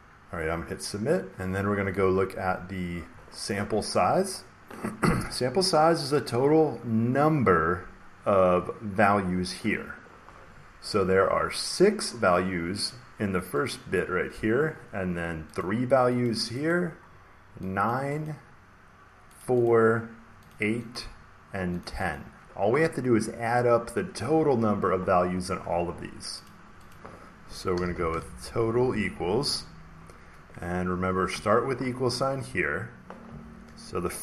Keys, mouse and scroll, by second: 0.8 click, 2.8 scroll down 1, 11.6 click, 13.6 click, 15.5 click, 16.2 click, 16.6 click, 17.8 click, 18.2 click, 19.3 click, 19.6 click, 20.4 click, 20.9 click, 21.7 click, 22.0 click, 26.4 click, 26.8 click, 27.5-29.2 typing, 31.0-31.7 typing.